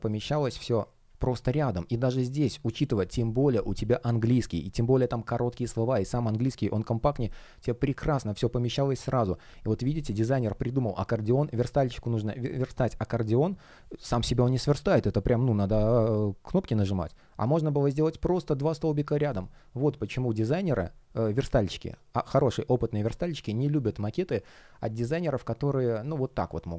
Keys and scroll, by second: 25.7 space.